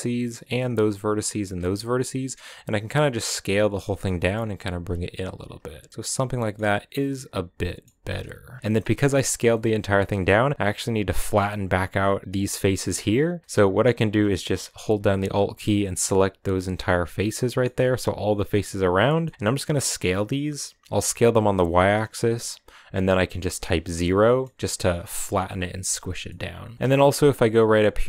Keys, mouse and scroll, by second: 1.3 b, 2.0 s, 4.0 g, 5.3 z, 5.7 scroll down 1, 5.9-6.4 middle drag, 6.4 scroll down 1, 6.6 Tab, 6.8-7.7 middle drag, 7.7 Tab, 8.2 scroll up 2, 8.4 shift+middle click, 8.8 a, 9.3-10.4 middle drag, 10.4 right click, 10.7 right click, 11.2 right click, 12.2 right click, 13.4-14.9 middle drag, 14.9 alt+right click, 15.5 scroll down 3, 15.8-19.2 middle drag, 19.2 s, 24.0-26.9 middle drag, 26.9 scroll up 1, 27.0-27.6 middle drag, 27.6 scroll up 1, 27.8-28.0 middle drag.